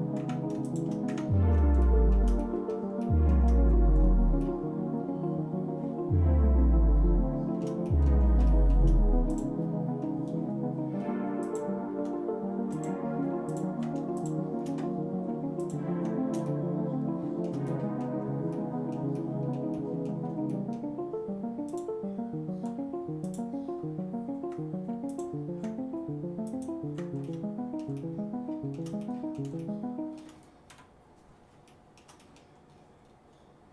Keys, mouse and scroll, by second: 0.2 Tab, 0.6 shift+click, 1.1 Tab, 1.8 shift+middle click, 2.4 middle click, 3.0 shift+middle click, 3.7 scroll up 1, 4.3 scroll up 1, 4.4-7.6 shift+middle drag, 7.9 middle click, 8.5 shift+middle click, 9.3 click, 11.4 shift+click, 12.7 click, 13.5 ctrl+click, 14.2 shift+click, 15.6 ctrl+click, 16.5 shift+middle click, 17.7 middle click, 18.5 middle click, 19.1 middle click, 19.7 middle click, 20.5 shift+middle click, 21.7 shift+click, 23.4 shift+click, 25.1 ctrl+click, 26.5 ctrl+click, 27.2 middle click, 28.0 shift+middle click, 28.2 shift+click, 28.5 shift+middle click, 29.0 middle click, 29.6 shift+middle click, 30.7 KP_Divide, 31.7 shift+middle click, 32.2 middle click, 32.7-33.3 scroll up 3.